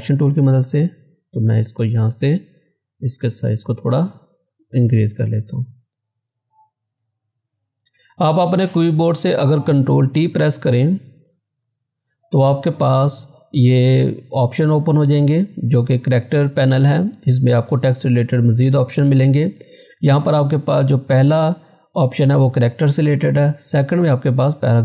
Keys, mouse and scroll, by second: 0.5-4.5 drag, 5.1 z, 6.2-8.9 drag, 10.5 scroll down 1, 11.7 ctrl+t, 23.8 click.